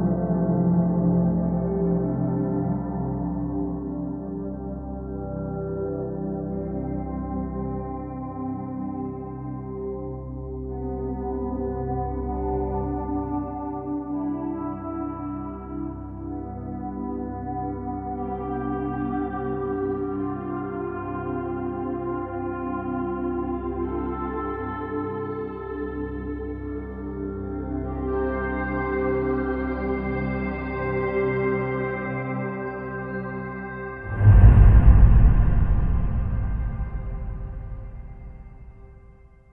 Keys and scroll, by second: 2.1-3.6 typing, 6.5 alt+], 20.7 space, 32.1 space.